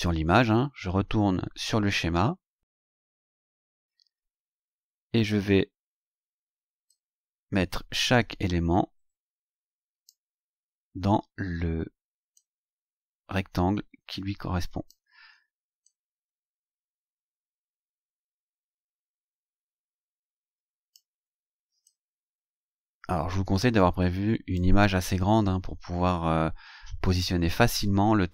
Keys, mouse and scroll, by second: 0.4-1.1 scroll up 4, 1.1 scroll down 2, 1.2 scroll up 2, 1.5 scroll down 2, 1.6 scroll up 2, 1.9 scroll down 2, 2.1-4.7 scroll up 12, 5.1-5.4 scroll up 2, 6.9-10.3 drag, 12.3-15.1 drag, 15.8-21.1 drag, 21.8-24.8 drag.